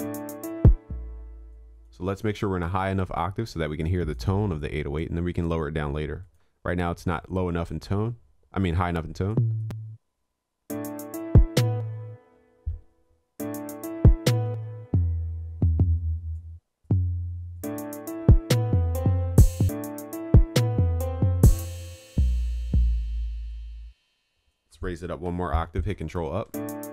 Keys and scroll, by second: 25.3 ctrl+Up.